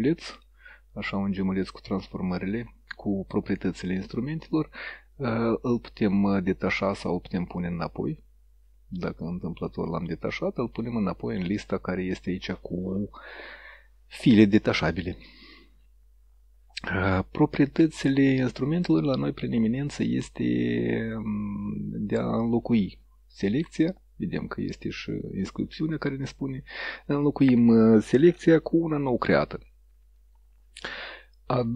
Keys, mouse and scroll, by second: 1.8 click, 5.9-10.9 drag.